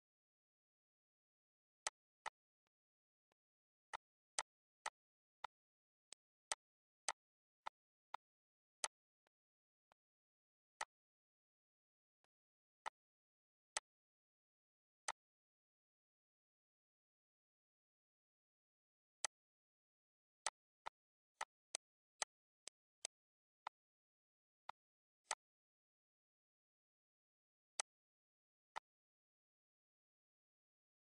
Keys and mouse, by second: 1.6 click, 3.0 shift+click, 3.6 shift+click, 5.1 click, 5.9 click, 6.8 click, 7.4 click, 8.6 click, 9.6 click, 11.9 shift+click, 12.6 click, 13.5 click, 14.8 click, 18.9 click, 19.9 click, 22.8 click, 24.0 click, 24.6 click, 27.2 shift+click, 28.2 click.